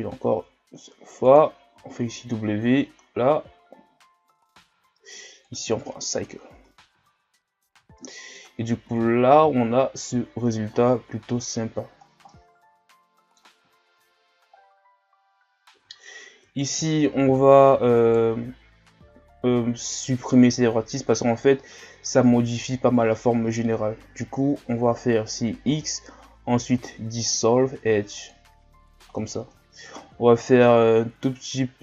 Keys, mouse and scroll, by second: 1.7 w, 6.3 scroll down 1, 6.6 Tab, 7.0 a, 7.2 scroll down 3, 7.7 a, 8.0-8.9 middle drag, 8.9 KP_1, 9.7-10.2 shift+scroll up 8, 10.7 ctrl+scroll down 5, 11.2 scroll up 2, 12.1 scroll down 2, 12.3-14.0 middle drag, 14.0 KP_1, 14.6-15.2 scroll down 2, 15.2-15.8 scroll up 3, 15.8 Tab, 16.6 alt+right click, 18.0-19.5 alt+right drag, 19.5 x, 25.6 x, 29.3 shift+scroll down 1, 30.4 scroll down 1, 30.8 scroll up 3, 31.5-31.8 scroll up 1.